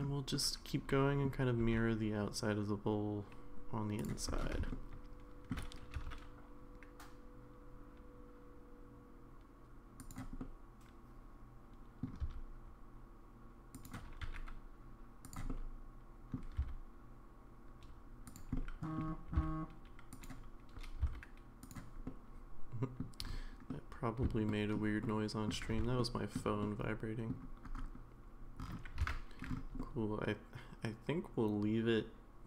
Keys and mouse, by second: 0.3 middle click, 1.6 e, 4.7 shift+middle click, 5.9 s, 10.4-12.0 middle drag, 12.2 s, 14.2 e, 15.5 middle click, 16.6 s, 18.6 middle click, 19.3 g, 21.1 s, 22.1 middle click, 23.7-24.7 middle drag, 25.0 shift+middle click, 26.0 shift+middle click, 26.6 middle click, 29.0 alt+z, 29.8-32.4 middle drag.